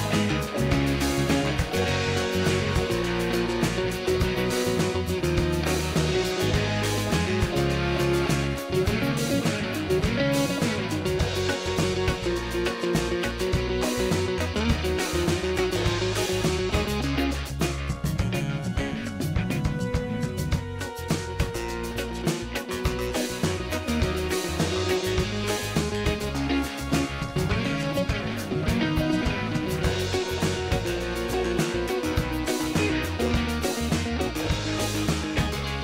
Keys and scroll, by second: 7.3 space, 8.1 space, 9.4 ctrl+space, 9.7 ctrl+space, 10.8 space, 24.8 ctrl+d.